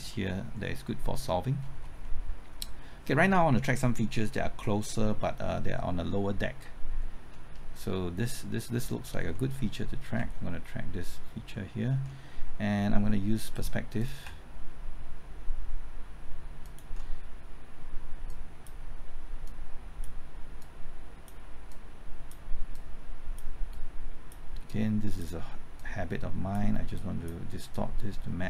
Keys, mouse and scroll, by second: 0.1 middle click, 0.8-1.1 scroll up 1, 1.1 middle click, 1.5-2.0 scroll up 1, 2.0-3.1 middle drag, 7.3-9.0 scroll up 1, 9.3 middle click, 13.4 click, 16.6 ctrl+click, 18.2-26.9 drag, 26.9 click, 27.7-28.4 drag.